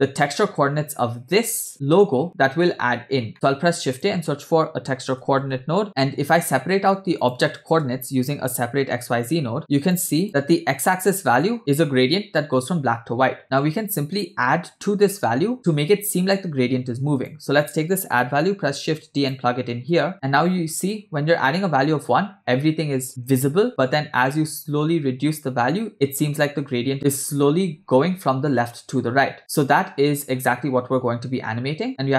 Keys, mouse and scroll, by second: 3.3 middle click, 3.3 shift+a, 5.8 click, 6.5 shift+a, 9.6-10.1 drag, 17.2 click, 18.6 shift+d, 19.9 click, 23.7-32.1 shift+drag.